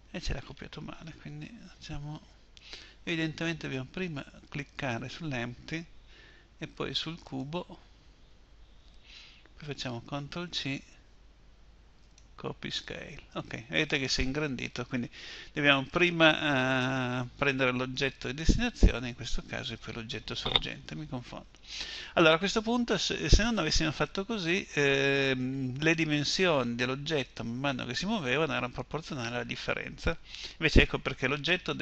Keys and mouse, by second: 1.0 ctrl+z, 9.7 ctrl+c.